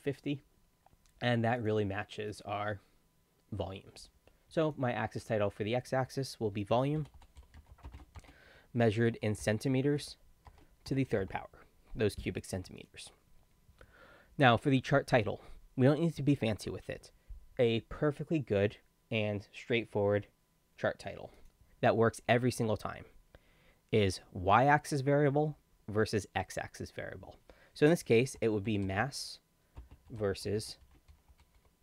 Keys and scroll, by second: 5.8 ctrl+a, 6.4-11.7 typing, 22.2 ctrl+a, 28.3 ctrl+shift+m, 28.6 ctrl+a, 28.8 ctrl+s, 28.9 ctrl+s, 29.7 ctrl+space, 30.0 ctrl+v, 30.1 ctrl+s, 30.4 ctrl+space, 30.8 ctrl+shift+v, 31.1 ctrl+o, 31.2 ctrl+l, 31.5 ctrl+u.